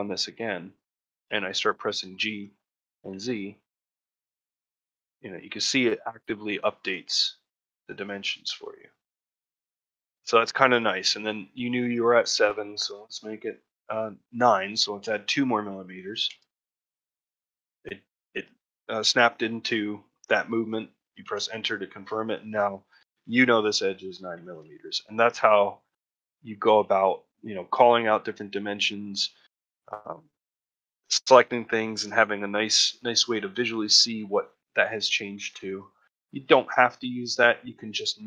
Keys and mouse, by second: 0.9 ctrl+middle click, 1.2 shift+middle click, 22.5 middle click, 23.8 middle click, 24.3 ctrl+middle click, 24.6 shift+middle click, 25.0-26.1 middle drag, 26.3 middle click, 26.7 shift+middle click, 28.3 middle click, 29.4 middle click, 31.7 middle click, 33.8 middle click, 36.1 middle click.